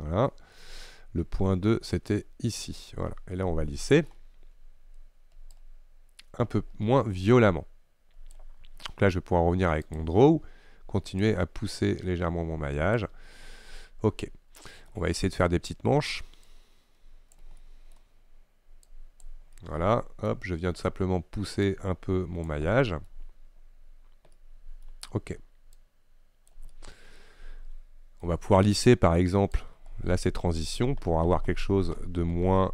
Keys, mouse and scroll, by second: 0.6-5.6 middle drag, 5.6-10.1 drag, 11.3-13.6 drag, 13.6-16.6 middle drag, 16.6-17.7 drag, 17.7-19.0 middle drag, 19.0 click, 19.6-21.7 middle drag, 21.7-22.8 drag, 22.8 middle click, 23.2-23.8 scroll up 1, 23.8-24.4 scroll down 2, 24.4-25.8 middle drag, 25.8 click, 26.8-28.3 middle drag, 28.3-29.2 scroll up 1, 29.6-32.7 shift+drag.